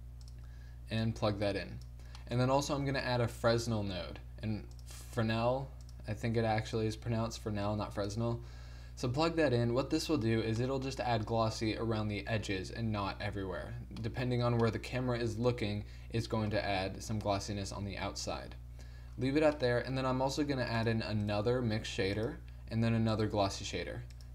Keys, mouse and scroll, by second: 1.1-2.9 drag, 2.9 shift+a, 6.8-8.5 drag, 8.5-13.4 middle drag, 14.1 middle click, 20.4-22.5 right drag, 20.6 g, 21.6 shift+d, 23.4 shift+d.